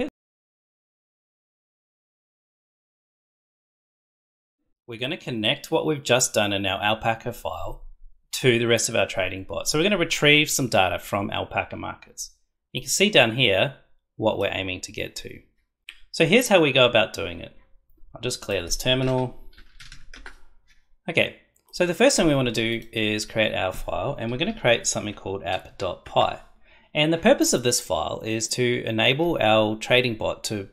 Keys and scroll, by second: 19.0-19.9 typing, 20.1 Return, 24.3-25.8 typing, 26.0 Return.